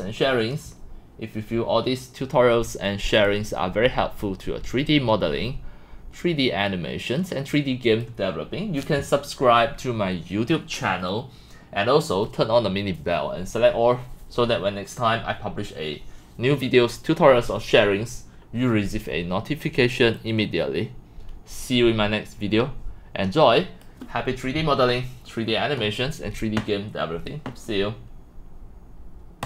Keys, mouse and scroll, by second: 1.8 click, 3.1 scroll up 1, 3.3-4.2 drag, 4.9-8.0 drag, 20.2-20.6 drag, 21.5-23.8 drag, 24.2-25.3 drag, 28.5 click, 29.4 click.